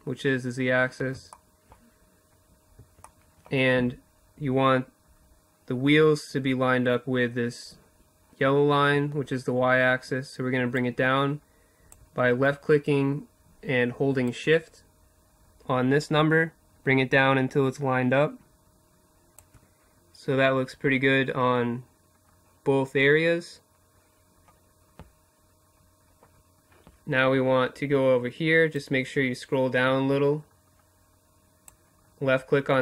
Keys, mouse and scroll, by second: 0.6-5.5 middle drag, 9.2-11.0 drag, 12.7-14.4 drag, 21.2 middle click, 27.1-29.0 drag, 31.8-32.8 drag.